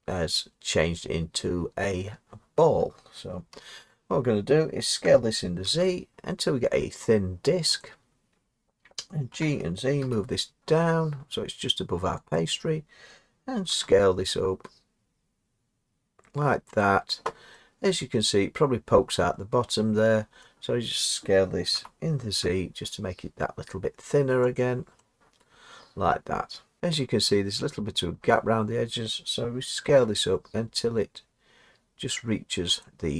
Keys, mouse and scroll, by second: 3.5 Tab, 5.1-5.7 typing, 7.9 click, 9.3 g, 9.7-12.0 drag, 10.0 g, 13.7 s, 17.1-18.9 drag, 20.4 middle click, 21.7 s, 22.5 z, 24.7 click, 25.5 middle click, 26.8 Tab, 28.2 Tab, 29.8 s, 32.9-33.1 drag.